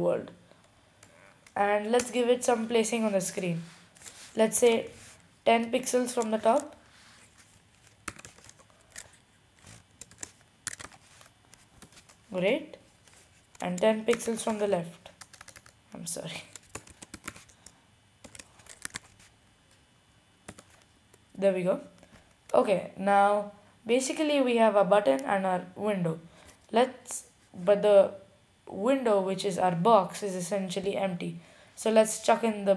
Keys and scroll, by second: 1.1 typing, 4.6 typing, 8.1-9.5 typing, 10.7-11.5 typing, 12.8-13.5 typing, 14.7-15.5 typing, 16.7-17.7 typing, 18.7-19.7 typing, 21.0 typing.